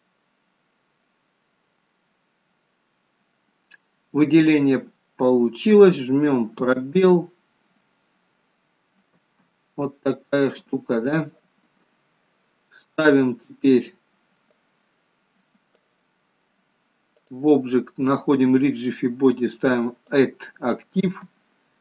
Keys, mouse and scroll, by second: 7.5 space, 9.6 space, 15.0 click, 17.9 click, 21.6 space.